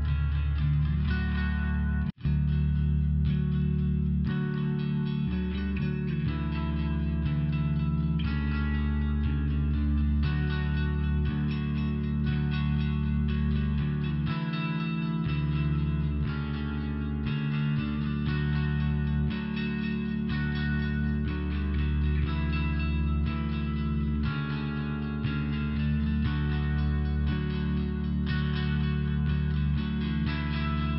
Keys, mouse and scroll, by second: 0.0 click, 0.6 click, 0.6 click, 1.3 click, 1.5 click, 2.3 click, 2.4 click, 2.8 click, 3.0 click, 3.9 click, 4.0 click, 5.0 click, 5.1 click, 5.2 click, 5.6 click, 5.8 click, 6.5 click, 8.6 ,, 9.1 click, 9.2 click, 12.1 click, 12.1 click, 12.8 click, 14.6 click, 16.3 click, 19.5 click, 20.3 click, 23.6 click, 25.3 click, 28.6 click, 30.0 click, 30.7 click.